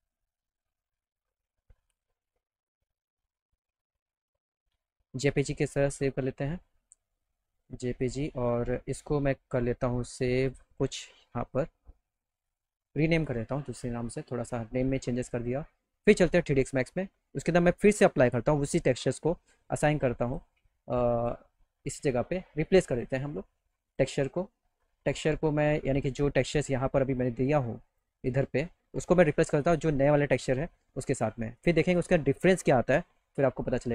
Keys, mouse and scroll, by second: 6.0 click, 9.7 click, 10.4 click, 11.5 2, 12.5 click, 16.2 click, 17.3 click, 20.3 click, 21.2 click, 22.7 click, 23.9 click, 24.9 click, 27.6 click, 29.1 click, 31.6 click, 33.8 click.